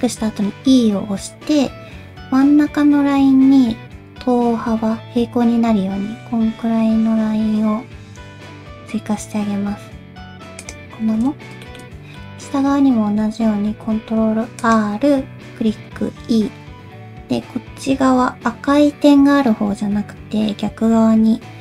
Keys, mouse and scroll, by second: 11.5 scroll down 1, 11.6 shift+middle click, 11.8-12.2 shift+scroll up 2, 12.2 middle click, 12.5-13.1 scroll up 2, 13.7 ctrl+r, 13.9-14.6 scroll up 1.